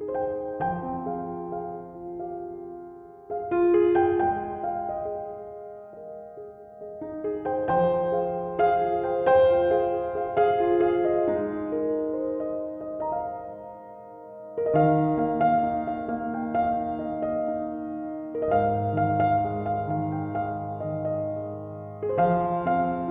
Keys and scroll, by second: 2.5 ctrl+z, 2.9 ctrl+z, 3.2 ctrl+z, 3.7 ctrl+z, 3.8 ctrl+z, 6.1 ctrl+z, 6.3 ctrl+z.